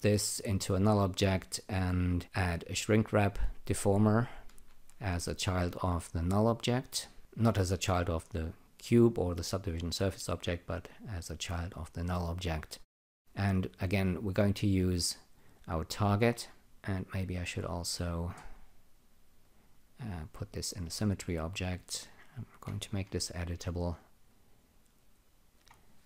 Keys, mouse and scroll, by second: 0.6 click, 1.5 click, 2.5-6.8 shift+drag, 8.3 click, 14.3 click, 15.1 click, 17.5 click, 19.4 alt+click, 22.9 c, 23.5 click, 24.3 click, 25.5 click.